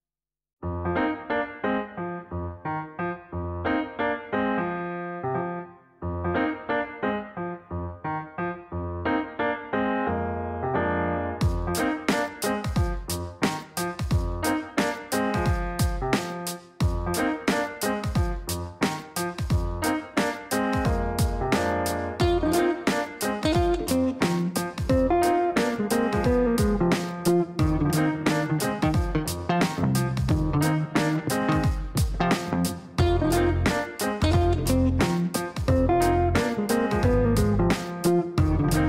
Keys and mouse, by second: 0.9 click, 2.5 click, 3.8 click, 4.5 space, 5.0 click, 5.4 space, 5.9 click, 6.1 space, 6.7 click, 7.6 click, 8.3 click, 8.6 space, 9.2 click, 10.8 click, 13.3 click, 17.3 click, 18.4 click, 19.8 click, 20.2 space, 20.8 click, 25.9 click, 27.0 click, 27.6 click, 30.0 click, 30.3 space, 30.8 click.